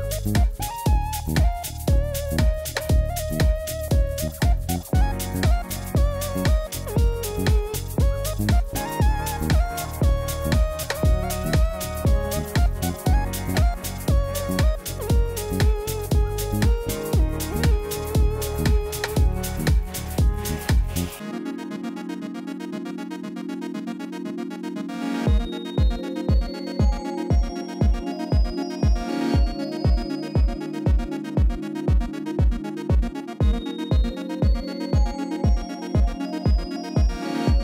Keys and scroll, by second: 0.3 Tab, 1.1 ctrl+r, 1.3 Return, 2.0 ctrl+r, 2.2 Return, 6.6 Tab, 7.2 Tab, 7.7 ctrl++, 11.1 Escape, 11.4 ctrl+z, 16.4 ctrl+z, 20.6 5, 20.7 Return, 21.9 Tab, 22.8 alt+a, 25.7 Tab, 28.9 Tab, 29.2 alt+a, 33.7 m.